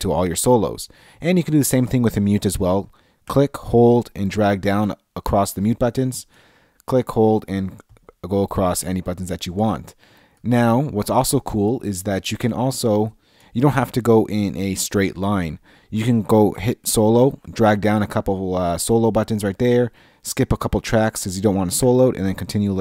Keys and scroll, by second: 3.3 Left, 9.4 Left, 10.4 Left, 13.4 Left, 16.8 Left.